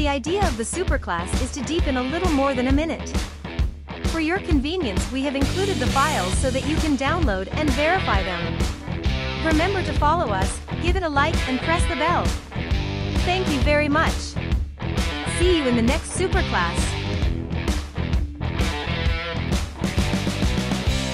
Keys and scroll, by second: 3.4 space, 17.7 space, 20.9 space.